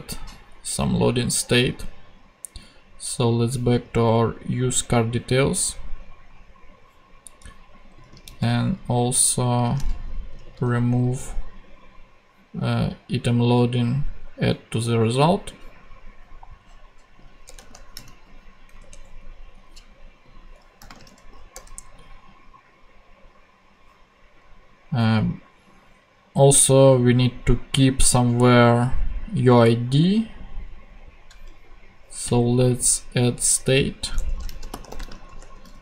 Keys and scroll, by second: 8.3 super+c, 10.5 super+v, 17.4 Return, 17.9 super+,, 18.7 ctrl+super+,, 18.8 ctrl+Tab, 20.8-21.6 typing, 34.1 Return, 34.5-35.8 typing.